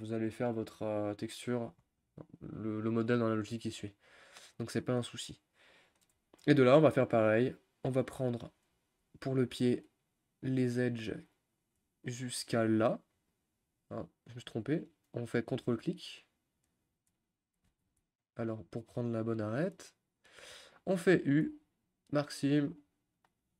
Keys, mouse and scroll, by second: 0.0-0.4 scroll down 2, 0.4 middle click, 1.3-2.5 scroll down 2, 2.5 click, 3.5-6.4 middle drag, 6.4 shift+scroll up 1, 6.4 shift+scroll down 1, 6.5-6.9 scroll up 5, 6.9-8.0 middle drag, 8.0 click, 8.6-12.7 middle drag, 12.7 shift+click, 13.8 scroll up 1, 13.8 middle click, 14.5 click, 14.9 click, 15.7 middle click, 16.7 ctrl+click, 17.7 ctrl+z, 18.3 ctrl+click, 19.7-22.4 drag, 22.4 u, 22.6-23.0 scroll down 2, 23.0-23.5 middle drag.